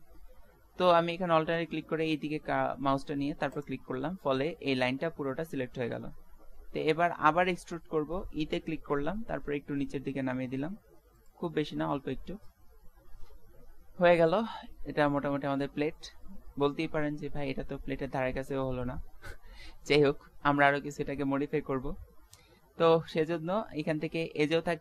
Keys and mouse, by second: 3.5-7.9 middle drag, 8.9 e, 11.6-13.4 middle drag, 14.7-19.1 middle drag, 20.9-22.9 middle drag, 24.4-24.8 drag.